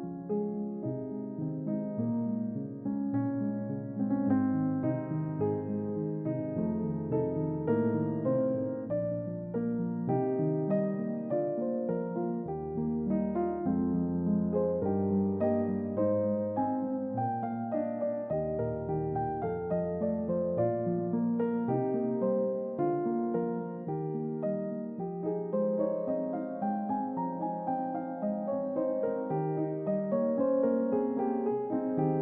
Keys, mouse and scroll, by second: 2.8 typing, 4.9 click, 11.8 click, 13.9 click, 15.4 click, 16.7 click, 17.2 middle click, 18.1 click, 18.6 Delete, 19.2 Delete, 26.3 click, 27.0 click, 28.0-28.3 scroll up 2, 28.5 middle click, 29.3 a.